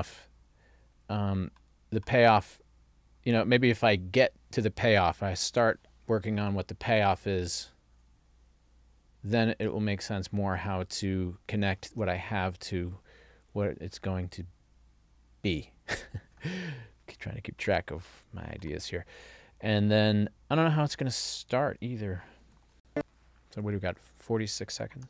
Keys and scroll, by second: 22.7 ctrl+alt+l.